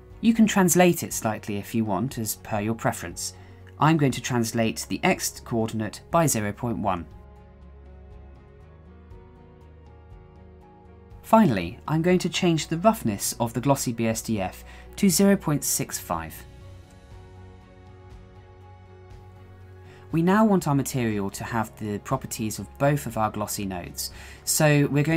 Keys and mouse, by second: 5.8-8.3 drag, 9.0 shift+middle click, 10.0 shift+middle click, 11.6-16.6 drag, 17.2 shift+middle click, 18.0 shift+middle click, 19.9-20.3 shift+middle drag, 21.8-22.4 middle drag, 23.0-23.5 middle drag, 24.0 shift+a.